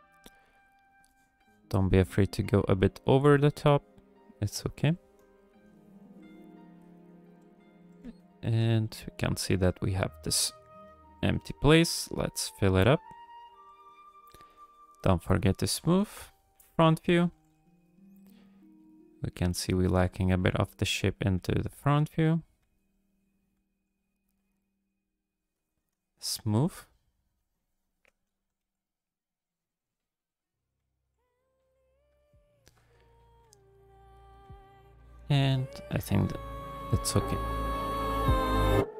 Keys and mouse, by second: 0.2 f, 0.6 click, 1.1 shift+click, 1.4 shift+click, 2.0 click, 2.8 click, 3.1 f, 3.7 click, 4.2 click, 4.5 click, 5.3 KP_3, 6.0 shift+click, 6.4 click, 7.1 click, 7.5 click, 7.8 g, 8.0 f, 8.6 f, 9.0 click, 9.7 click, 9.7 f, 10.6 click, 10.8 f, 11.4 click, 12.0 click, 12.2 f, 12.7 click, 13.2 click, 13.7 click, 14.0 shift+click, 14.2 shift+click, 15.2 shift+click, 16.0 KP_1, 16.8 shift+click, 17.3 g, 17.5 f, 18.2 click, 19.0 click, 19.7 f, 20.4 click, 20.8 click, 21.3 f, 21.8 click, 22.6 f, 23.1 click, 23.5 f, 24.1 click, 24.7-25.8 drag, 25.9-28.0 shift+drag, 28.4 g, 28.6 f, 29.2 click, 30.3 click, 30.8 f, 31.4 click, 31.8 click, 32.2 shift+click, 32.5 shift+click, 32.9 middle click, 33.1 click, 33.1 middle click, 33.4 f, 33.9 click, 33.9 middle click, 34.1 click, 34.4 f, 34.9 click, 35.8 KP_1, 36.5 ctrl+click, 38.7 click.